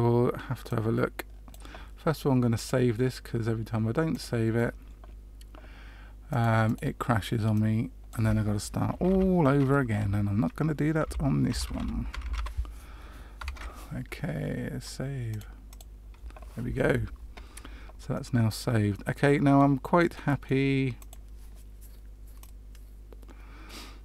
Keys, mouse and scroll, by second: 0.6 click, 2.5 click, 18.1 middle click, 20.1 middle click, 20.9 click, 22.3 click.